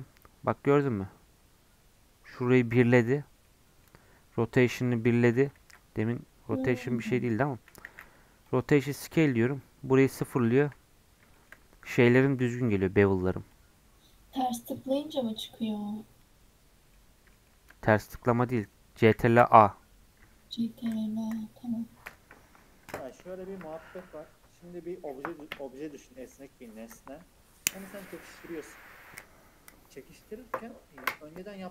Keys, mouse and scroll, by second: 0.7 scroll down 1, 3.4-5.6 middle drag, 5.6 ctrl+z, 7.8 ctrl+a, 8.9-10.9 middle drag, 10.9-11.3 scroll up 2, 11.3-13.5 shift+middle drag, 13.5-16.5 drag, 16.6 scroll down 2, 16.9-19.1 middle drag, 19.1 ctrl+a.